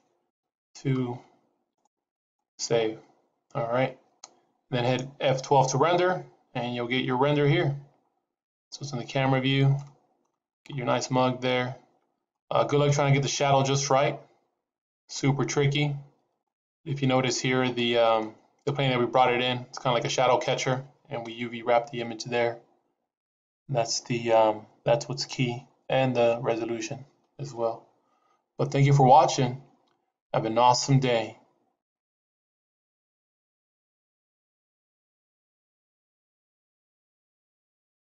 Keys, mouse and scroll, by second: 17.7 middle click, 18.3 scroll down 4, 18.6 middle click, 21.1 KP_0.